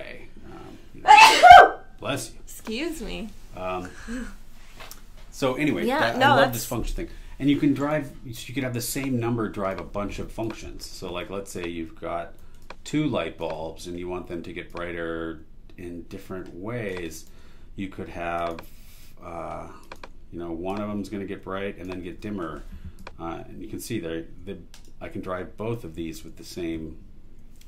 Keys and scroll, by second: 7.8 super+e, 17.2 super+e, 18.1 shift+super+e.